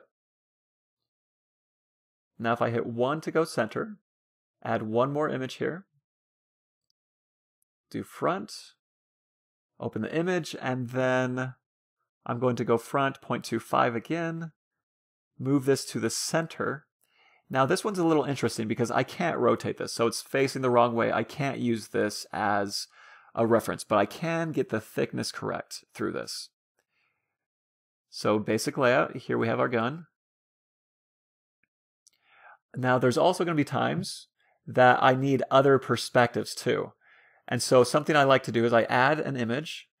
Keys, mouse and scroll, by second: 1.2 KP_1, 5.6-9.3 drag, 9.7-11.2 drag, 11.4-13.4 middle drag, 13.0-14.8 drag, 15.7-17.1 drag, 21.9 a, 22.1 a, 22.5 s, 26.7-28.3 middle drag, 27.9 KP_3, 30.7-32.3 middle drag, 34.8-36.3 drag, 37.8-39.4 middle drag, 39.0-40.0 drag.